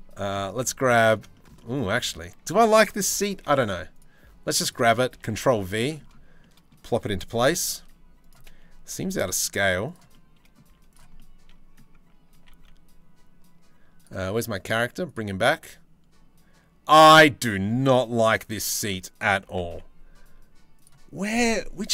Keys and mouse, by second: 4.9 ctrl+v, 5.1 click, 6.0 click, 7.0 KP_7, 7.4 z, 8.5 g, 9.7 click, 10.2 z, 10.7 click, 11.9 g, 14.6 click, 15.1-16.7 drag, 18.3 click, 19.0 g.